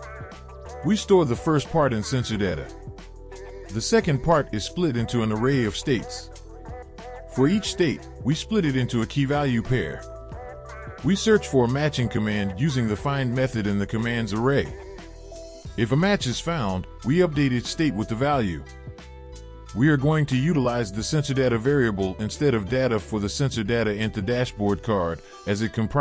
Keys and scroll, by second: 22.4 ctrl+c, 24.1 ctrl+v, 25.4 ctrl+s.